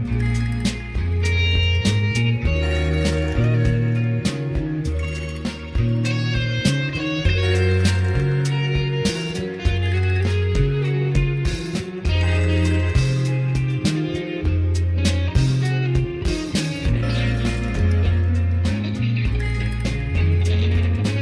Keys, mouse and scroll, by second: 3.3 click, 8.6 click, 9.1 click.